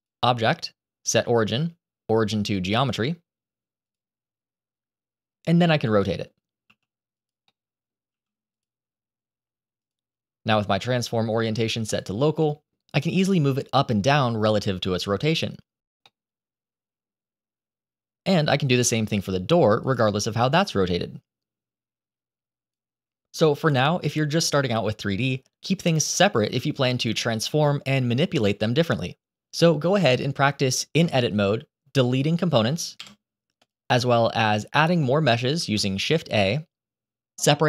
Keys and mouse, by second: 0.0-3.8 drag, 5.5-6.1 middle drag, 6.5 r, 7.4-7.8 middle drag, 8.0 r, 9.7-12.1 drag, 12.3 middle drag, 13.3-15.5 drag, 16.1-16.9 middle drag, 18.6 r, 20.5-22.6 drag, 30.9 Tab, 32.0 click, 32.9 Delete, 35.5 shift+a.